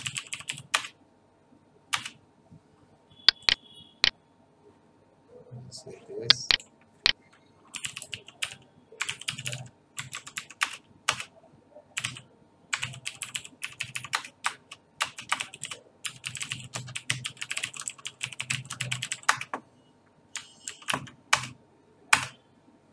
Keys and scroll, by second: 0.0-1.0 typing, 7.5-14.1 typing, 14.1 Return, 15.1-19.6 typing, 20.6 alt+f, 20.9 Up, 21.3 Return.